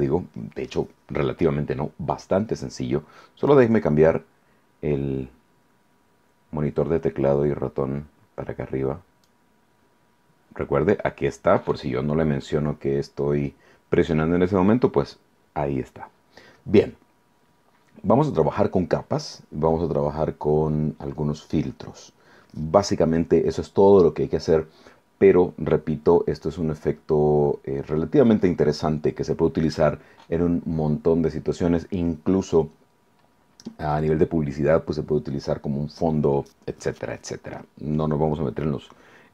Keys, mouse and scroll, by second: 3.5-9.5 drag.